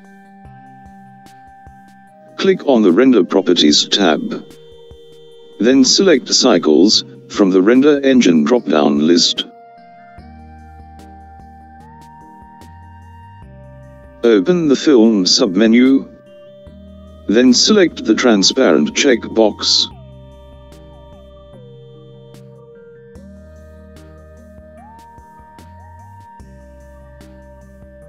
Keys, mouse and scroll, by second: 7.2 click, 11.2-14.7 drag, 21.4 click, 24.4-26.4 scroll down 3, 26.4-28.0 scroll down 2.